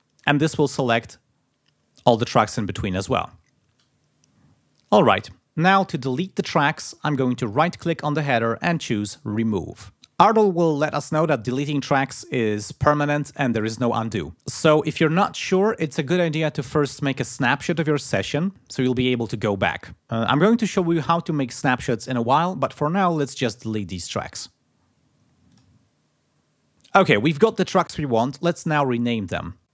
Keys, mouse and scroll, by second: 7.5 right click, 25.5 click.